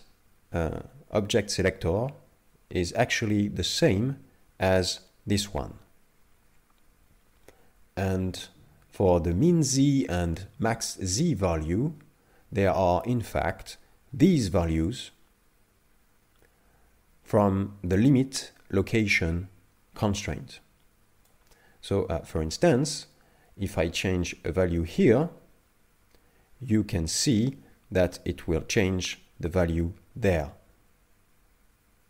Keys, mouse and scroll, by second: 12.5-14.0 scroll down 4, 14.0-17.1 scroll down 1, 20.2 click, 24.5 click.